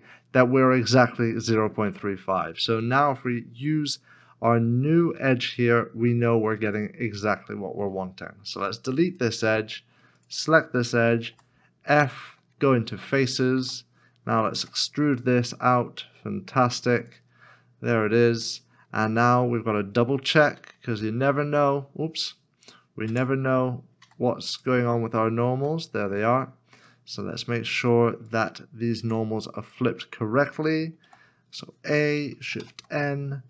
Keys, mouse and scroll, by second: 5.2 x, 6.7 alt+click, 7.4-8.6 scroll down 1, 8.6 x, 10.2 alt+l, 11.3 f, 13.6 3, 14.6 e, 17.9 e, 18.1 middle click, 18.9 scroll down 1, 20.9 q, 23.1 Tab, 25.9 q, 29.0 Tab, 31.1 a, 32.6 shift+n.